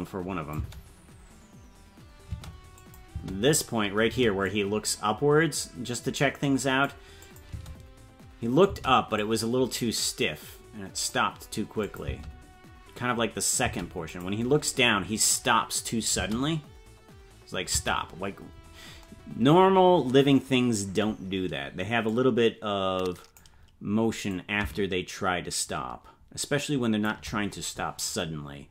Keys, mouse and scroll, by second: 0.6 space, 2.7 click, 2.7 space, 3.1 space, 4.4-6.9 drag, 4.4 space, 7.2 click, 7.4 space, 9.1-11.1 drag, 11.8 click, 12.0 space, 13.6 space, 14.1 click, 16.1 space, 18.7 space, 22.0-23.4 drag, 24.3-27.1 drag.